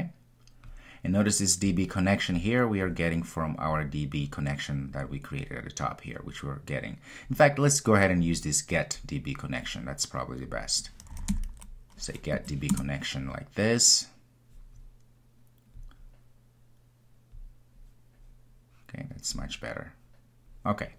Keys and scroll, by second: 12.7 Return.